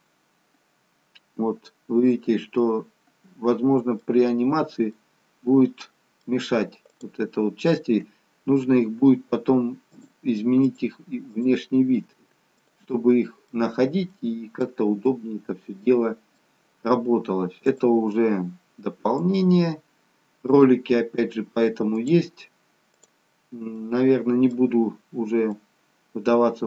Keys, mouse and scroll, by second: 5.2 middle click, 7.0 click, 10.0 shift+click, 13.3 middle click, 14.3 middle click, 17.8 shift+click, 24.0 middle click, 25.1-25.6 scroll down 2, 25.6 middle click.